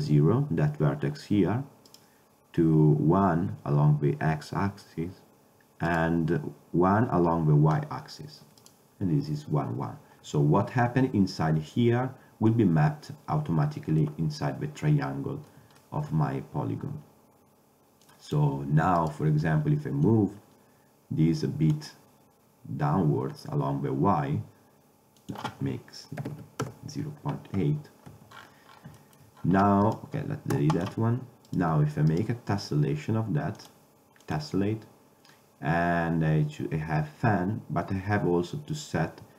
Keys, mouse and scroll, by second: 2.0-3.8 drag, 6.0-7.8 drag, 8.7-10.5 drag, 15.9-18.1 middle drag, 18.1 click, 19.9 click, 21.0-24.3 drag, 25.3-28.2 drag, 28.2 Tab, 28.4-31.1 drag, 30.6 x, 33.8 middle click, 33.9-36.3 drag.